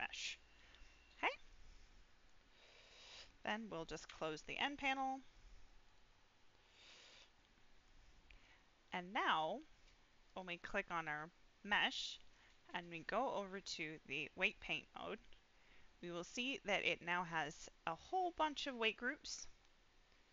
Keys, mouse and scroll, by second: 1.3 middle click, 4.0 n, 5.8-7.0 drag, 7.3 middle click, 8.8-9.4 scroll down 1, 9.4-10.2 scroll down 1, 10.2 click, 12.9-14.8 drag, 16.3 scroll up 2, 16.7 scroll down 1, 18.0 scroll down 6, 19.1 scroll down 6.